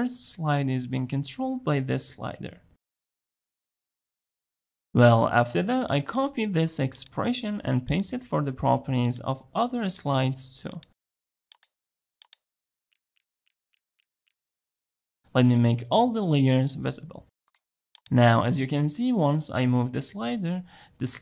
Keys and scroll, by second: 10.3 ctrl+v.